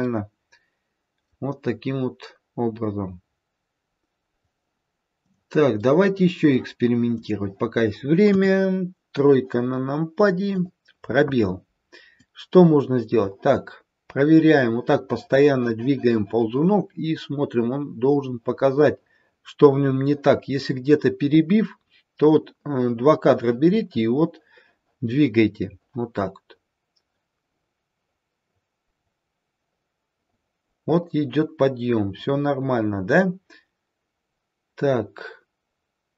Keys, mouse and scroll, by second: 5.3 click, 5.7 middle click, 7.1 click, 8.7 KP_3, 10.4 click, 12.1 click.